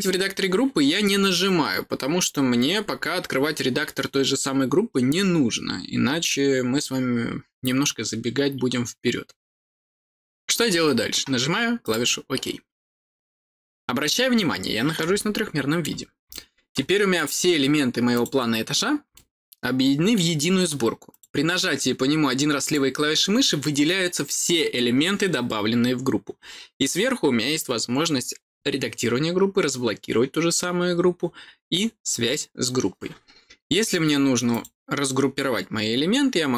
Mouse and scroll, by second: 11.8 click, 15.1 middle click, 16.2 middle click, 17.1 click, 18.1 click, 19.1-20.1 middle drag, 21.0 click, 22.6 click, 34.4 click.